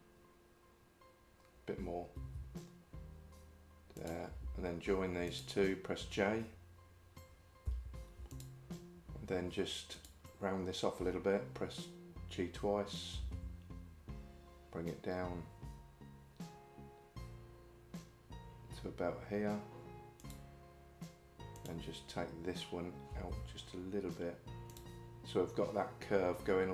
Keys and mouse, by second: 2.3 g, 5.3 shift+click, 7.7 j, 21.6 click, 23.1 g.